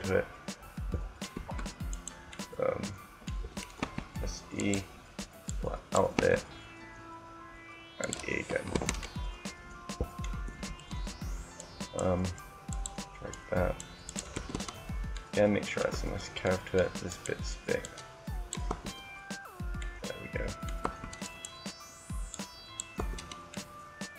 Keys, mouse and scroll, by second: 1.1 Tab, 2.1 right click, 2.5 right click, 3.5 e, 4.5 click, 4.8 e, 6.0 e, 8.7 Tab, 10.4 Tab, 11.4-12.9 right drag, 13.0-14.5 right drag, 14.2 Tab, 14.5 middle click, 15.9 Tab, 16.8-18.0 drag, 17.6-18.6 right drag, 18.6 Tab, 20.8 Tab, 21.2 right click, 22.0 click, 22.9 Tab, 23.4 middle click.